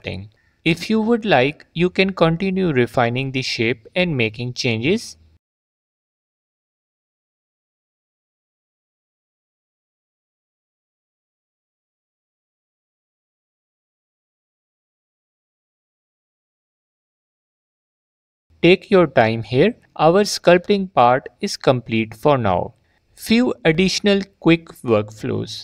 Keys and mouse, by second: 2.0 ctrl+z, 2.5-5.2 drag, 8.7 middle click, 9.3 alt+click, 15.6 g, 15.7 f, 16.1 f, 16.2 click, 16.4 click, 16.8 F4, 17.6 F4, 17.8 middle click, 21.0 g, 21.1 f, 21.3 click, 21.4 f, 21.5 click, 22.1 click, 22.5 f, 22.6 click, 23.1 f, 23.2 click, 24.1 f, 24.2 middle click.